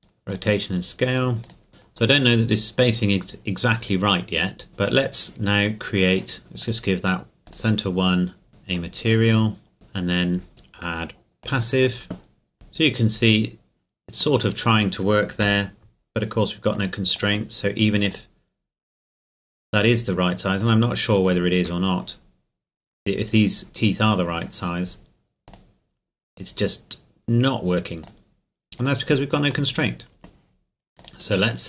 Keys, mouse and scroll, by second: 0.3 click, 0.7 scroll down 1, 1.4 right click, 1.8 click, 3.8-4.7 scroll down 1, 4.7-5.3 scroll up 1, 6.6 click, 9.7 middle click, 11.4 click, 14.4 middle click, 15.4 KP_1, 16.7 click, 20.6-23.5 drag, 25.5-27.7 drag, 28.0-29.7 drag, 29.7 middle click, 31.0 right click.